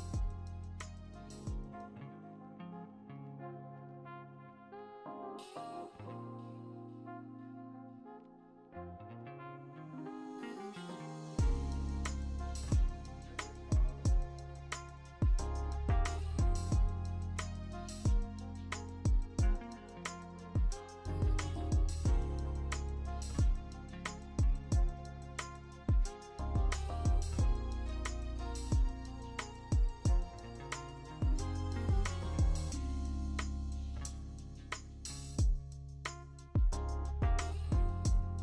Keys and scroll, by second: 0.0-2.8 typing, 0.1 Return, 0.2 Return, 0.8 Escape, 2.5 ctrl+z, 7.3 ctrl+z, 8.9 ctrl+z, 10.1 1, 13.5 ctrl+z, 14.0 ctrl+z, 17.5 ctrl+z, 18.0 ctrl+z, 18.6 ctrl+z, 22.6 ctrl+z, 26.9 ctrl+t, 27.5 Escape, 28.9 ctrl+t, 28.9 ctrl+d, 29.7 ctrl+t, 29.7 v, 30.6 Escape, 31.3 Escape, 31.4 Escape, 31.9 m, 37.0 ctrl+d, 38.1-38.4 scroll.